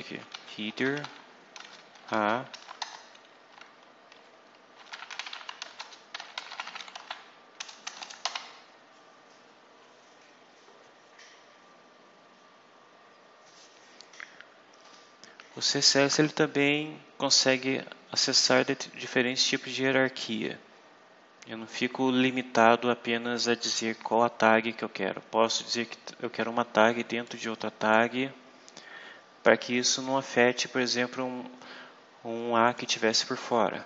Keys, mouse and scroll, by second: 0.0-2.4 typing, 2.7 shift+Return, 4.4-8.1 typing, 27.1 click, 32.6 click.